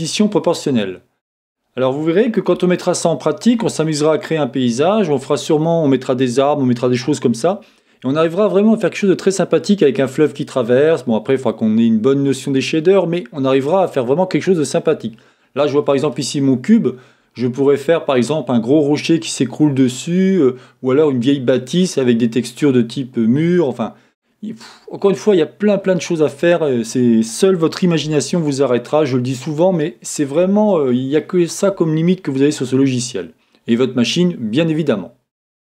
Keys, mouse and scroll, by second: 0.0 Tab, 0.0 click, 0.8 middle click, 1.2-2.8 middle drag, 4.5-35.7 middle drag.